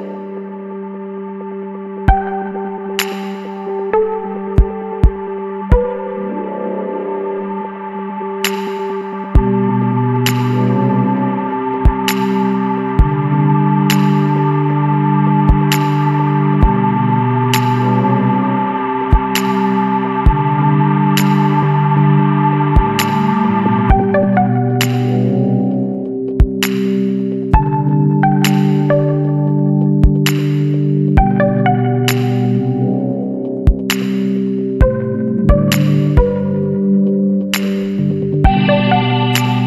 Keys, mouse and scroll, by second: 0.6 click, 1.5 KP_4, 2.8 KP_Enter, 3.9-5.2 scroll up 5, 6.5 click, 7.8 click, 8.3 space, 12.4 click, 14.3 click, 15.8 click, 17.0 click, 18.7 click, 19.6 click, 21.6 click, 23.9 Escape, 25.3 click, 26.1 click, 27.9 click, 29.0 KP_Subtract, 30.0 KP_7, 30.4 KP_Enter, 32.5 click, 33.7 click, 34.7 KP_0, 34.9 KP_Decimal, 35.2 KP_7, 35.4 KP_5, 35.8 KP_Enter, 38.0 click, 39.4 click.